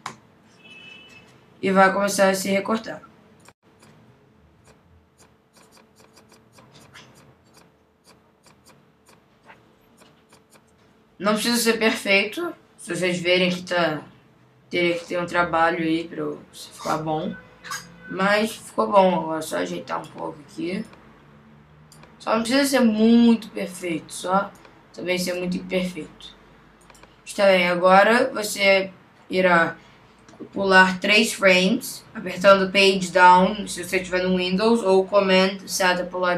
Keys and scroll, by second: 10.2 super+z.